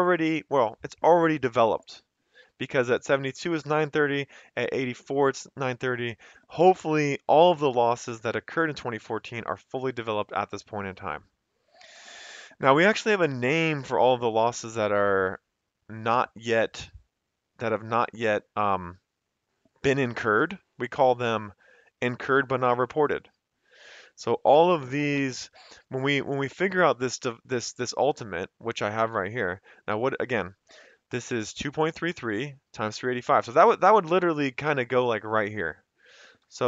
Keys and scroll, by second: 0.1 Escape, 31.1 F2, 33.2 Escape, 36.4 =.